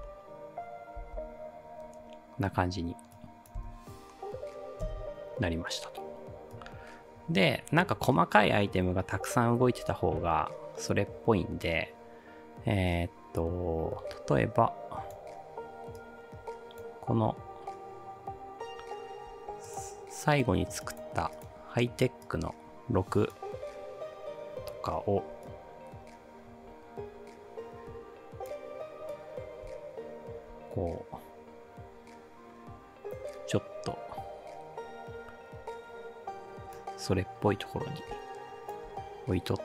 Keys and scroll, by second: 3.6 space, 4.9 space.